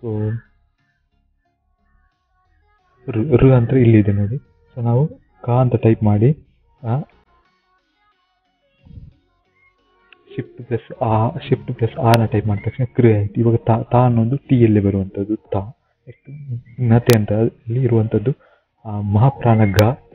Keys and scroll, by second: 0.9 typing, 9.9 typing, 15.4 shift+t.